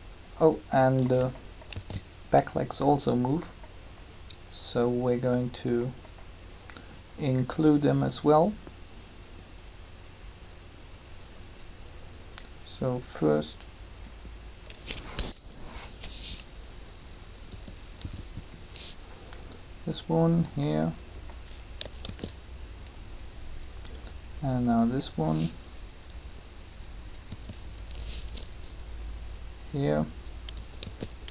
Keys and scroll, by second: 1.6 alt+a, 15.1 3, 17.5 r, 22.0 shift+d, 27.3 r, 30.8 shift+d.